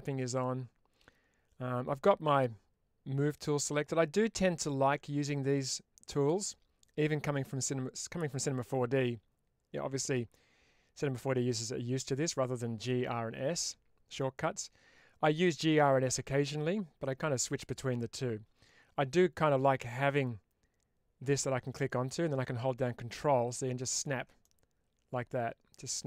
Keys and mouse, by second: 20.1-23.9 drag, 24.3-26.0 middle drag.